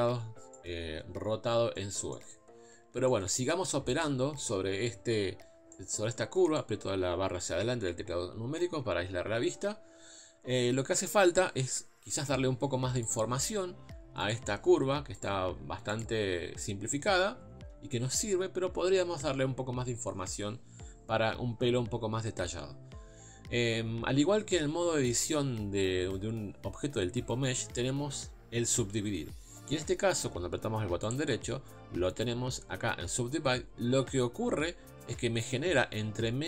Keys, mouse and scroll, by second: 4.0 click, 5.7-7.6 middle drag, 7.6 KP_Divide, 8.1 KP_7, 8.8 Tab, 12.3-14.3 drag, 15.2 shift+click, 16.0 shift+click.